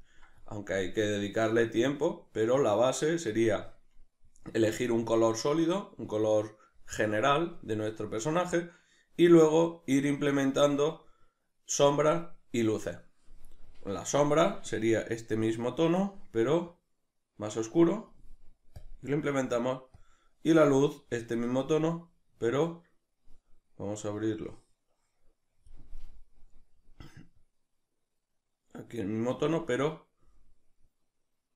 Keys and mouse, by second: 16.7-31.5 drag.